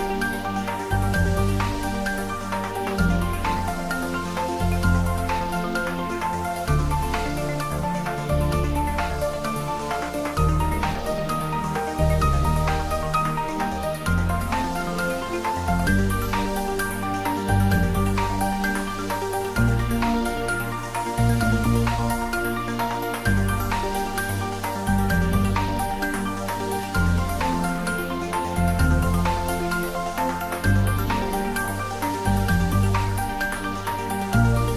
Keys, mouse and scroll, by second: 0.0-0.8 scroll up 1, 2.1 r, 3.4 click, 4.6 r, 11.6 click, 12.1-12.8 scroll down 1, 13.8 click, 14.9 scroll down 1, 17.2 scroll down 1, 17.3 shift+d, 18.2 x, 25.8 click, 27.3-27.7 scroll down 1, 27.7-28.8 scroll up 1, 29.2 shift+d, 29.6 y, 30.8 x, 34.1 click, 34.5 scroll down 1.